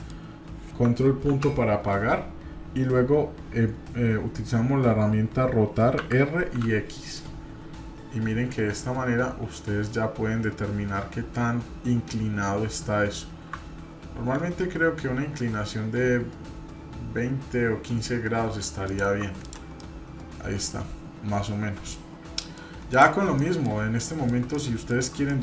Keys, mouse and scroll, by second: 1.2 ctrl+., 19.4 click, 19.8-22.0 middle drag, 22.0-22.4 scroll down 2, 22.4 middle drag, 22.9 click, 23.3 shift+middle click, 24.0-25.0 middle drag, 25.3-25.4 middle drag.